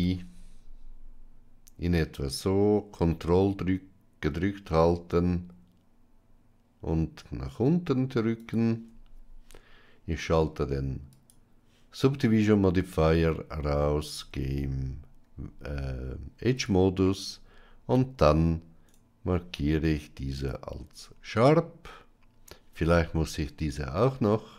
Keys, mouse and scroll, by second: 11.0 click, 14.0 Tab, 18.8-20.4 right drag.